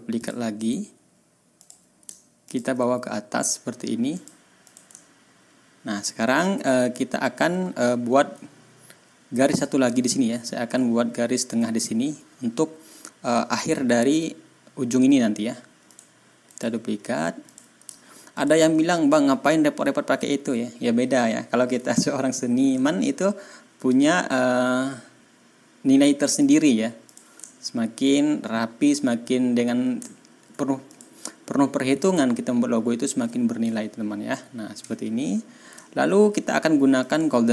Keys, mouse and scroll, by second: 0.1 click, 0.5 right click, 1.5 click, 2.4 shift+click, 4.1 click, 4.6 click, 4.9-5.5 ctrl+scroll down 4, 5.7-6.1 ctrl+scroll up 2, 6.5-6.8 ctrl+scroll down 2, 6.9 ctrl+scroll up 2, 10.0 ctrl+scroll up 2, 10.9 ctrl+scroll down 2, 15.8 click, 16.4 right click, 17.4 click, 18.3 shift+click, 19.5 ctrl+scroll down 2, 26.3 click, 27.0 click, 27.4 ctrl+scroll down 2, 27.8 ctrl+scroll up 2, 30.0 ctrl+scroll down 2, 30.8 ctrl+click, 32.6 ctrl+scroll up 2, 33.7 ctrl+scroll down 2, 34.3 ctrl+scroll up 2, 35.7 ctrl+scroll down 2, 36.9 click.